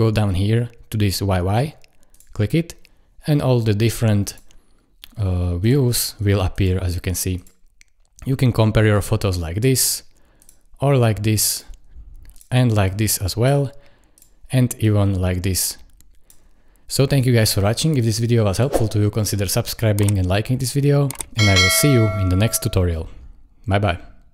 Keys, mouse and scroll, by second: 17.6 click.